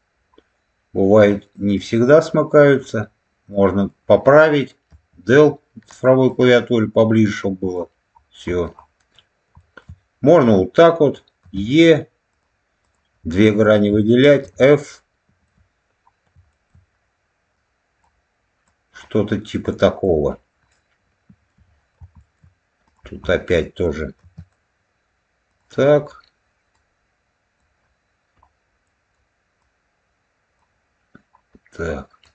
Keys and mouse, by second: 3.4 middle click, 6.2-7.6 drag, 9.5 shift+middle click, 10.3-13.1 drag, 14.3 f, 14.8 middle click, 16.4 shift+middle click, 17.5 click, 18.5 click, 19.6 click, 20.6 middle click, 22.1 shift+middle click, 22.8 click, 23.2 middle click, 24.1 e, 25.4 click, 26.6 click, 28.8 middle click, 29.5 click, 32.1-32.3 drag.